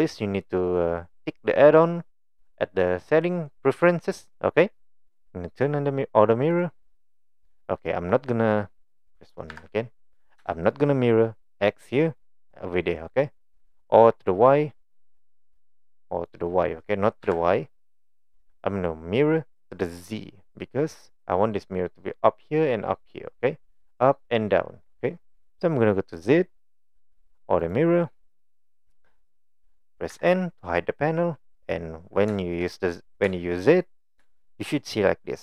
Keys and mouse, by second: 6.5 click, 9.5 KP_1, 10.5 shift+middle click, 14.1-15.0 middle drag, 15.2-15.6 middle drag, 15.9-16.3 middle drag, 17.2 KP_1, 26.6 click, 27.6 click, 30.1 n, 32.4 shift+middle click, 33.3 shift+middle click, 34.4 shift+middle click.